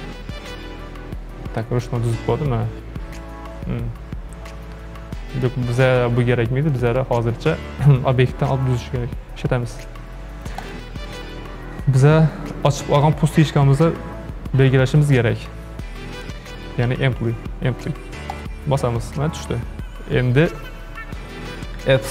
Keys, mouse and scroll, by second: 7.2 ctrl+z, 10.6-13.7 drag.